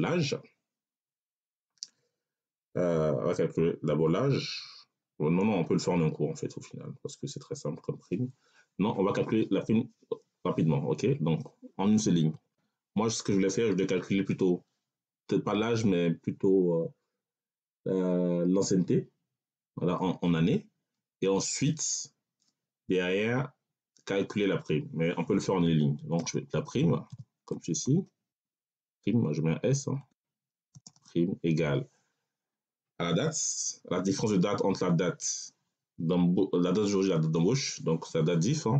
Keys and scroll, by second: 12.2 p, 26.1 r, 27.0 i, 27.4 m, 27.7 e, 28.8 s, 30.6 space, 30.7 /, 30.8 space.